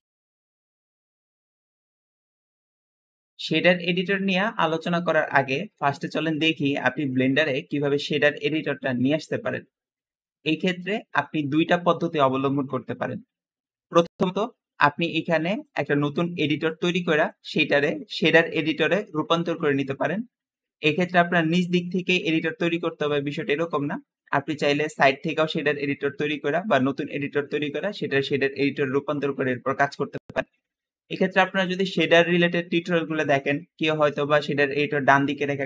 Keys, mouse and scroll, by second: 24.7 click.